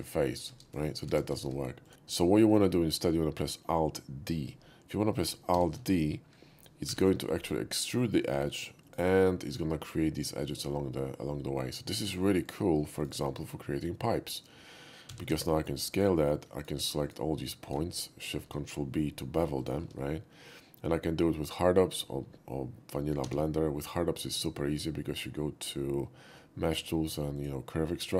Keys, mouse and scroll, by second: 0.5 ctrl+z, 0.7 right click, 1.2 ctrl+z, 1.4 ctrl+z, 1.8 click, 1.9 g, 5.5 alt+d, 6.9 y, 8.9 click, 9.5 click, 10.4 click, 11.0 middle click, 12.1 Tab, 12.5 click, 13.0 shift+click, 15.1 s, 15.3 x, 15.9 click, 16.6 click, 17.1 shift+click, 18.2 ctrl+shift+b, 19.6 click, 19.8 Tab, 23.3 q, 27.4 click.